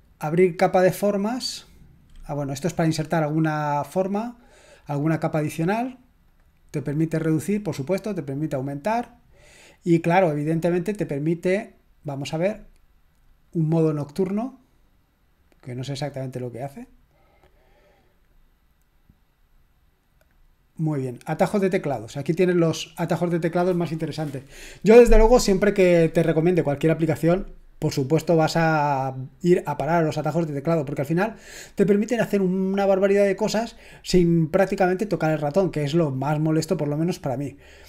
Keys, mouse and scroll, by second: 0.4 click, 3.2 click, 4.9 click, 6.3 click, 7.9 click, 8.7 click, 9.7-11.0 drag, 11.6 click, 13.5-15.0 drag, 15.5 click, 20.3-21.8 drag.